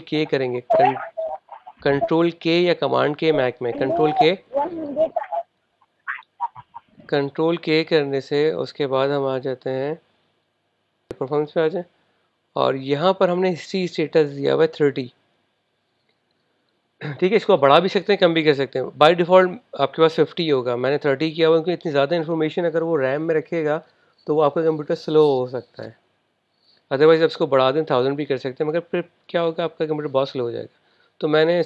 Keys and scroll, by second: 3.1 super+k.